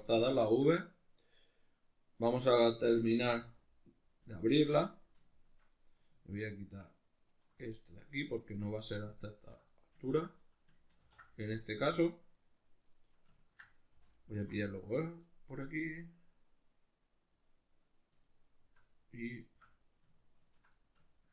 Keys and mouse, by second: 2.2 right click, 3.3 2, 3.6 right click, 4.5 ctrl+right click, 4.8-6.4 middle drag, 6.4 ctrl+right click, 7.3 ctrl+right click, 7.6-9.4 middle drag, 9.4 ctrl+right click, 9.7-13.1 middle drag, 11.0 ctrl+e, 13.1 right click, 13.4 ctrl+right click, 14.1 alt+shift+right click, 15.2-18.3 middle drag, 18.3 shift+right click, 18.5 shift+right click, 19.5 shift+right click, 20.4 ctrl+right click, 20.8-21.3 middle drag.